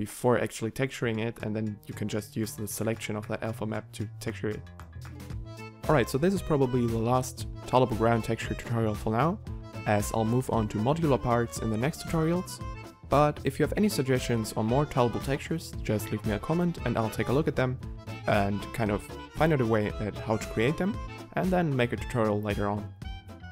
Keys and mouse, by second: 2.0 click, 8.2 middle click, 10.0 middle click, 13.9 g.